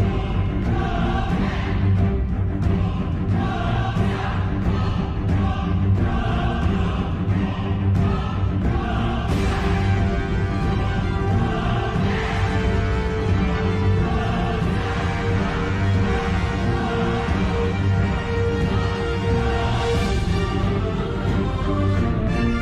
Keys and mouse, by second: 1.1 middle click, 3.5 shift+middle click, 5.1 middle click, 6.2 shift+middle click, 7.1 shift+middle click, 8.6 click, 10.0 KP_7, 11.8 shift+middle click, 13.3 s, 15.2 g, 18.3 shift+middle click, 18.8 middle click, 19.6 middle click, 21.8 shift+middle click, 22.5-22.6 middle drag.